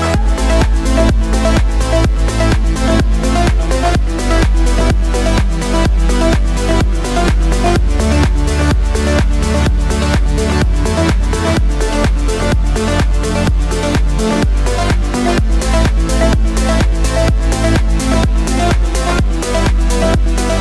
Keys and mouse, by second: 0.0 s, 0.8 middle click, 1.7-13.2 drag, 11.9-14.3 typing, 13.2-20.6 middle drag, 15.7 r, 16.7 g, 19.6-20.6 drag.